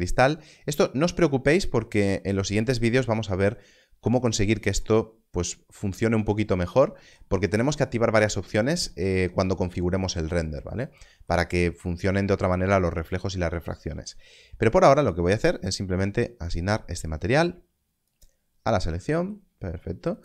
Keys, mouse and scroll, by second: 16.4 click.